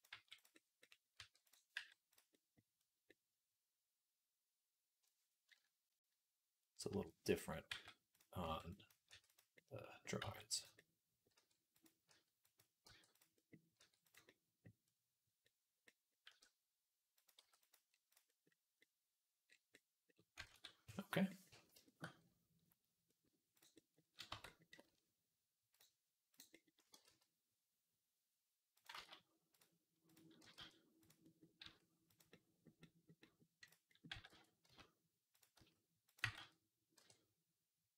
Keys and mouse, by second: 1.0 r, 1.6 g, 2.1-21.4 middle drag, 6.7 KP_3, 7.5 g, 8.3 r, 8.9 r, 10.1 g, 11.2 r, 11.9 r, 12.7 g, 13.6 r, 16.1 r, 17.2 g, 20.4 ctrl+s, 24.1 Tab, 25.6 click, 25.6-29.3 middle drag, 26.8 g, 28.8 ctrl+z, 29.3-31.0 drag, 30.2 g, 31.0-33.0 middle drag, 31.5 s, 33.2-37.9 middle drag, 34.0 g, 35.4 s, 36.1 g.